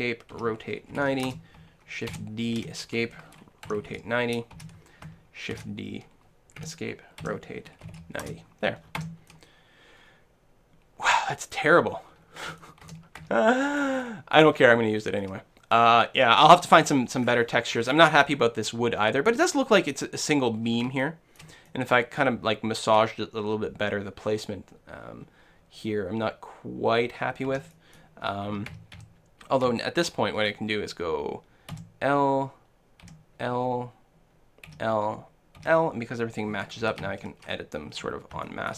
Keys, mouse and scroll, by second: 0.4 r, 2.1 shift+d, 3.7 r, 7.3 r, 9.1 Tab, 9.3-11.2 middle drag, 11.9-12.6 scroll up 1, 12.6 Tab, 12.6-16.1 middle drag, 13.2 Tab, 17.2-23.5 middle drag, 18.8 scroll up 1, 27.5 Tab, 27.7-32.5 middle drag, 28.6-29.0 a, 31.8 l, 33.1 l, 34.7 l, 35.6 l, 36.9 a, 37.0 a, 37.5-38.7 middle drag.